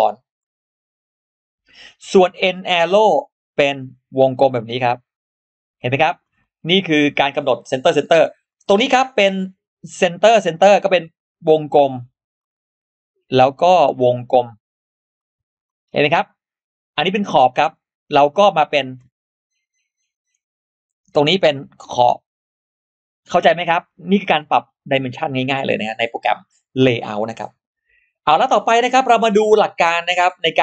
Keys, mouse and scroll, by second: 2.7 click, 4.6 click, 5.0 click, 5.5 scroll down 2, 6.2-6.5 scroll down 2, 6.7 scroll up 1, 8.3 click, 10.3 click, 12.2 click, 13.3 click, 15.0 click, 15.5 click, 15.8-16.1 scroll down 2, 16.5-17.1 scroll up 2, 17.6 click, 21.0 click, 22.3 click, 23.0 click, 23.4-24.0 scroll down 1, 24.0-24.3 scroll up 1.